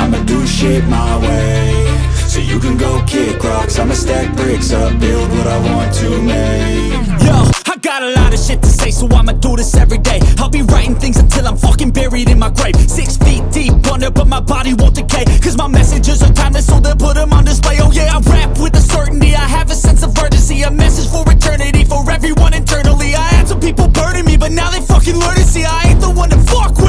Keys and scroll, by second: 0.1 alt+BackSpace, 3.9 Return, 5.6 BackSpace, 5.7 Return, 8.3 ctrl+t.